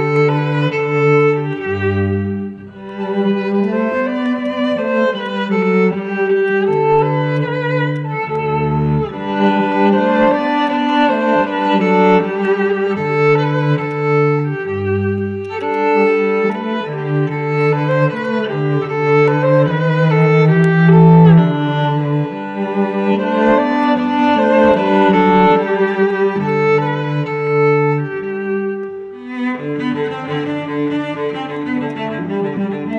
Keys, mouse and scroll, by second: 0.0-0.6 scroll up 1, 0.6 scroll down 1, 1.1 alt+click, 3.0 scroll up 1, 3.4 alt+click, 4.2 scroll down 1, 4.4 alt+click, 5.0 alt+middle click, 6.2 scroll up 1, 6.5 alt+click, 7.1 alt+middle click, 8.0 alt+click, 8.4 alt+middle click, 8.9-10.1 scroll down 1, 10.9 double click, 11.4-11.9 typing, 12.0 Return, 15.7 right click, 17.6 double click, 19.6-20.1 scroll up 1, 20.2 alt+click, 23.2 scroll down 1, 23.5 alt+middle click, 23.8 alt+click, 26.2 scroll up 1, 26.5 alt+click.